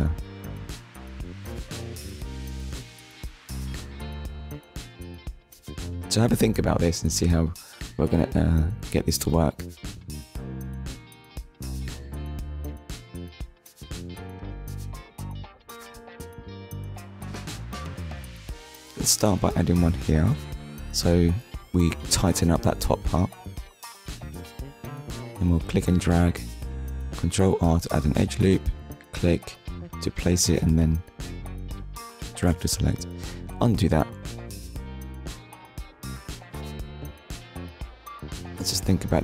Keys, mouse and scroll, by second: 0.0 click, 0.3 middle click, 7.2 click, 8.0 middle click, 8.7 shift+middle click, 9.3 middle click, 11.6 ctrl+r, 17.6 click, 22.6 click, 23.5 ctrl+r, 24.3 click, 26.7 click, 27.1 middle click, 30.2 ctrl+z, 30.9 middle click, 34.0 middle click, 35.5 shift+middle click, 36.2-36.6 scroll up 1.